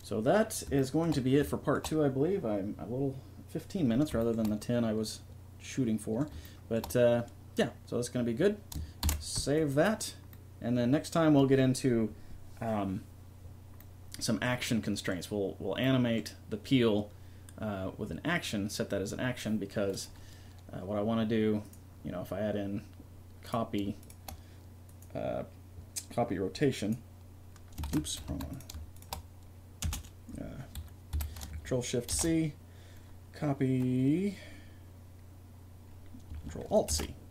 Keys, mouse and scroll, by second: 9.0 ctrl+s, 13.8-15.8 middle drag, 19.9-21.6 right drag, 21.6-23.4 middle drag, 23.4-24.8 right drag, 24.8-26.4 middle drag, 26.4 right click, 27.8 ctrl+z, 28.3 a, 28.5-30.8 right drag, 29.8 space, 32.1 ctrl+shift+c, 36.9 ctrl+alt+c.